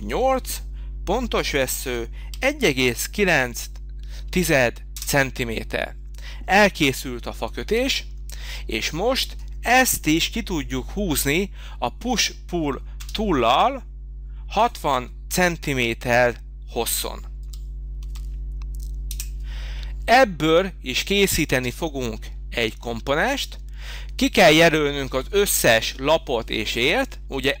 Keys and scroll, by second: 1.8 1, 2.8 9, 3.8 9, 4.9 Return, 5.5 Return, 13.0 p, 17.4 6, 19.0 0, 19.1 Return, 21.9 space.